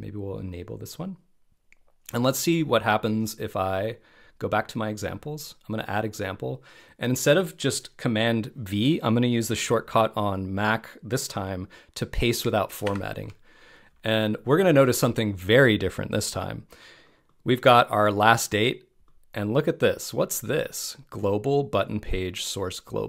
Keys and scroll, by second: 12.8 alt+shift+super+v.